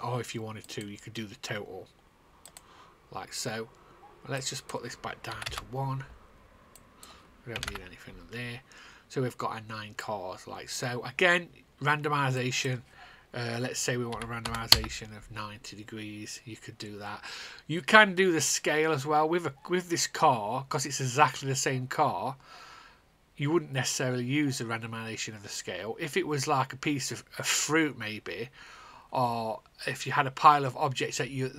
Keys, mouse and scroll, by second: 5.2 KP_1, 6.0 Return, 6.7 click, 7.2 click, 7.5 KP_0, 8.2 Return, 8.2 KP_0, 9.9 click, 14.0 KP_9, 15.2 Return.